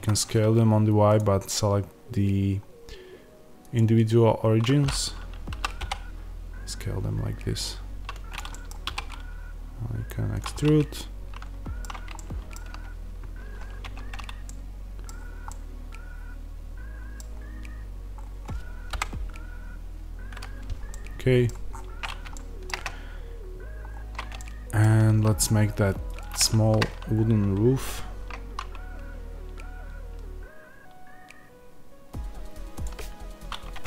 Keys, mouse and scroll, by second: 0.0 Escape, 3.5-8.3 drag, 5.5 s, 8.4-10.3 middle drag, 8.8 e, 10.3 click, 10.5-26.0 middle drag, 13.7 Tab, 15.0-15.4 scroll down 1, 17.2-18.0 scroll down 1, 18.0-18.8 scroll up 1, 18.8 KP_0, 21.3 scroll down 1, 21.6-21.9 scroll up 1, 22.2-22.6 shift+scroll up 1, 22.6 shift+scroll down 1, 23.7-24.3 scroll up 1, 26.0-32.7 shift+right drag, 33.6 Tab.